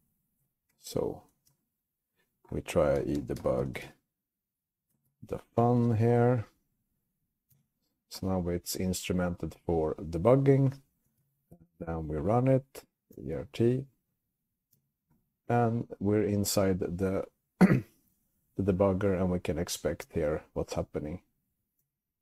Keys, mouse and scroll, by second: 0.1 Up, 0.9 ctrl+a, 1.7 alt+x, 2.8-6.6 typing, 7.7 Return, 10.9-12.3 typing, 11.5 alt+x, 13.3 Return, 14.9 Return, 20.1 space.